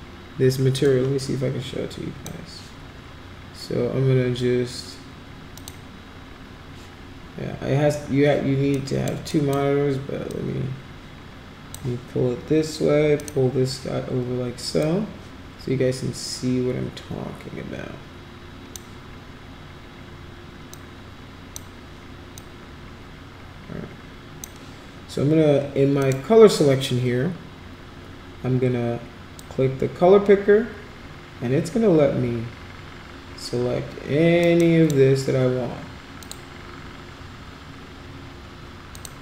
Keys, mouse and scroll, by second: 0.9-2.2 drag, 5.6 click, 8.7 click, 9.3 click, 10.3-11.7 drag, 13.2 click, 14.8-18.7 drag, 20.7 click, 22.4-24.4 drag, 26.0 click, 29.4-34.9 drag, 34.5 right click, 36.2 click, 38.9 click.